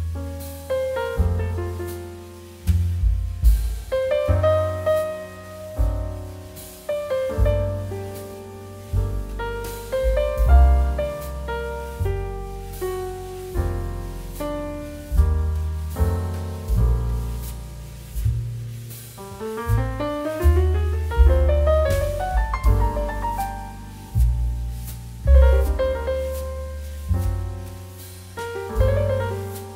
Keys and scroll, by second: 4.6 space, 12.0 space, 18.4 space, 21.7 ctrl+z, 22.9 space, 25.3 space, 26.0 ctrl+z, 26.6 space, 27.4 space, 28.0 ctrl+z, 28.4 space.